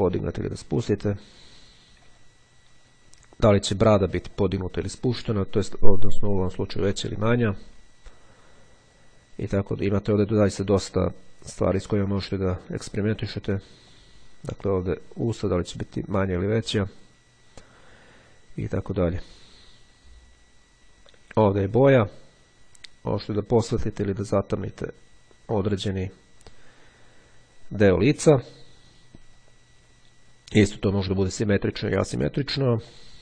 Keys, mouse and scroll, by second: 2.2 click, 4.2-8.8 drag, 10.5-12.2 drag, 14.0-17.6 drag, 19.1 click, 21.6-27.7 drag, 32.6-33.2 drag.